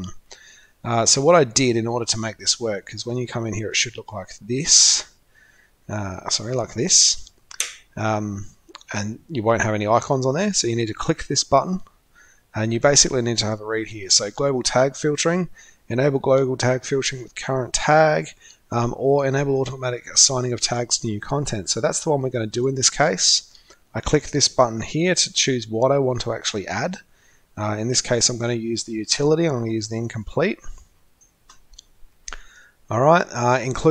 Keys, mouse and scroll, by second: 6.3 click, 8.6 click, 20.6 click, 22.5 click, 25.4 scroll up 1, 25.9-26.3 scroll up 1, 26.3-28.4 scroll down 2, 29.9 click, 30.1-30.6 drag, 31.1 click.